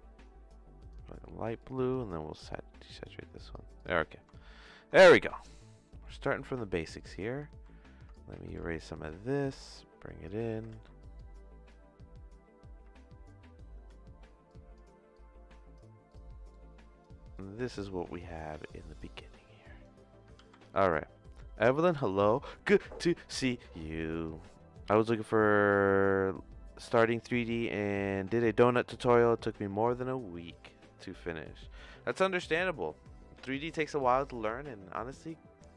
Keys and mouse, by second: 1.6 click, 3.7 click, 4.4 shift+middle click, 5.9 middle click, 6.9 click, 7.5 ctrl+x, 8.1 click, 8.4 ctrl+x, 8.8 click, 9.7 click, 10.7 ctrl+z, 11.2 click, 13.7 ctrl+x, 14.5 click, 15.1 click, 16.5 ctrl+click, 17.3 click, 18.6 g, 19.4 click, 20.3 ctrl+s.